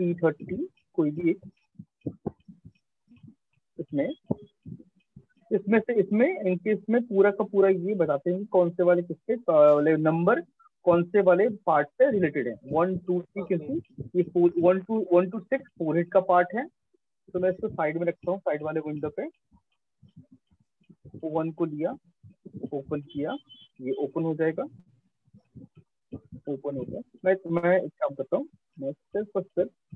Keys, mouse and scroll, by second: 2.6 click, 5.4 right click, 8.6 click, 19.2 click, 20.9 click, 21.9 click, 25.1 alt+click, 26.7 shift+click, 27.8 right click.